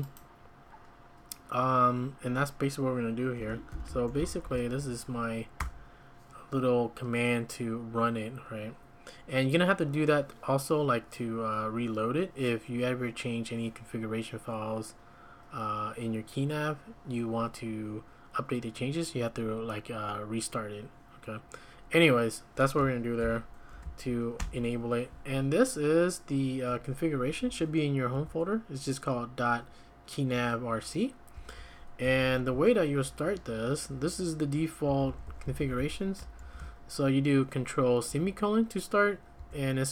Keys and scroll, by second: 3.7 ctrl+l, 3.8-4.9 typing, 5.6 Return, 23.2 ctrl+l, 23.7 ctrl+a, 24.4 x, 27.3 Escape, 27.5 Escape, 28.1 j, 31.3-36.6 typing, 38.1 Escape, 38.3 Escape, 39.4 j.